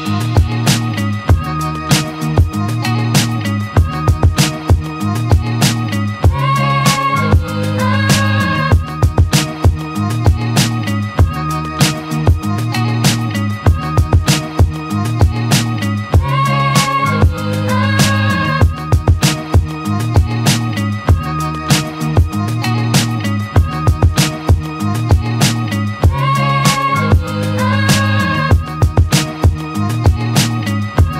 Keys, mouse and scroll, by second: 3.6-5.2 drag, 8.1 click, 8.7 ctrl+click, 9.0 z, 11.0 ctrl+click, 11.7 click, 15.8 click, 16.2 alt+right click, 16.5 alt+click, 17.0 Tab, 17.7 click, 18.0 alt+right drag, 18.3-19.5 alt+drag, 19.5 alt+right drag, 19.8-20.4 alt+drag, 20.4 z, 20.9-22.0 alt+drag, 22.0 alt+middle drag, 22.2 alt+right drag, 22.4-22.8 alt+drag, 22.8-23.2 alt+middle drag, 23.2 alt+right drag, 23.3-23.7 alt+drag, 23.7 alt+middle click, 24.1 alt+right drag, 24.4-24.8 alt+drag, 25.3 click, 25.8-27.1 alt+drag, 27.1 z, 29.1-30.3 scroll up 2, 30.3 right click.